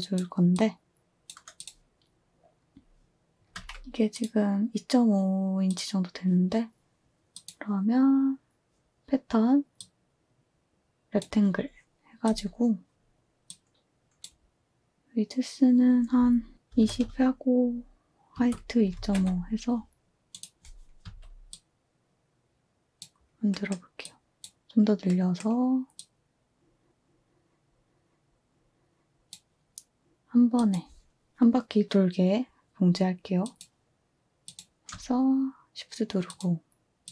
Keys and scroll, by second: 3.5 z, 16.4-17.3 typing, 18.3 Tab, 18.6-19.6 typing, 21.0 a.